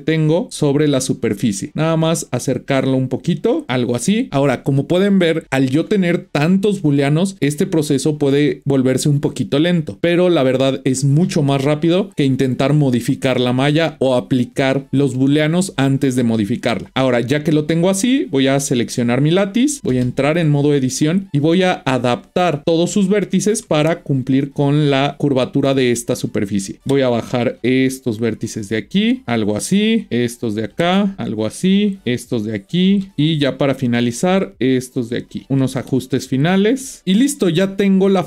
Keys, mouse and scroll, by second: 18.3 click, 20.6 Tab, 21.3 click, 22.6-23.0 scroll up 4, 23.0-25.5 shift+middle drag, 26.9 g, 30.0 click, 30.7 g, 32.0 click, 34.4 g, 35.4 click, 35.8 g.